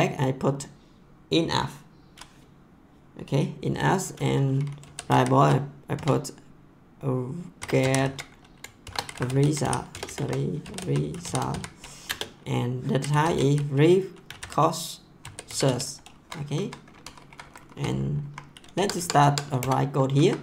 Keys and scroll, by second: 4.6-5.9 typing, 7.5-16.1 typing, 16.5 Right, 17.0 Down, 18.1 Up, 18.7 Tab, 19.6 Return, 20.1 Up.